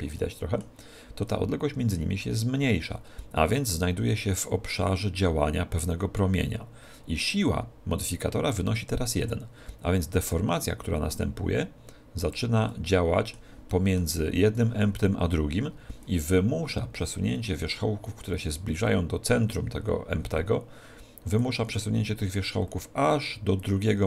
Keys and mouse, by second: 10.3 click, 12.6-15.6 middle drag, 21.4 click.